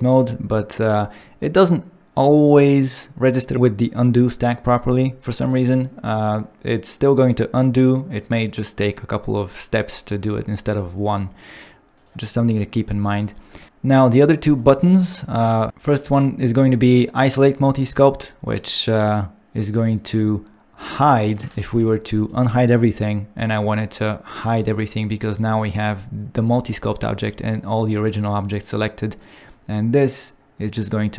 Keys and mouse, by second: 11.9 click, 21.2 click, 21.7 alt+h, 22.1 click, 25.5 click, 29.3 click, 30.7 click.